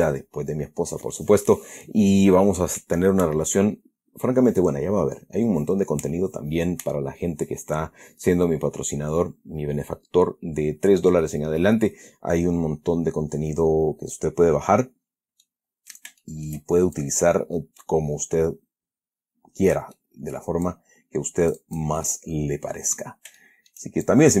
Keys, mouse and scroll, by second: 15.1-15.4 scroll up 1, 15.8-16.4 middle drag, 16.5-17.0 shift+middle drag, 17.3-20.3 shift+drag, 20.3-20.9 middle drag, 21.0-22.3 drag, 22.4-23.5 middle drag, 23.7 shift+middle click, 23.8-24.4 shift+scroll down 1.